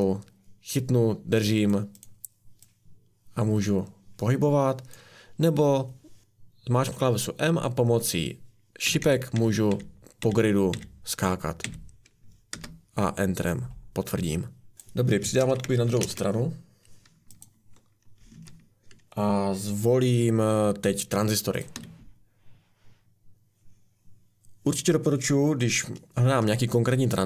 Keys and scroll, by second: 6.2 Left, 6.2 Right, 6.2 m, 8.9 Left, 9.0 Left, 9.4 Right, 9.7 Down, 12.5 Up, 12.5 Return, 14.7 Escape, 14.7 Delete, 15.4 ctrl+c, 16.0 ctrl+v, 18.3 Escape, 21.7 a.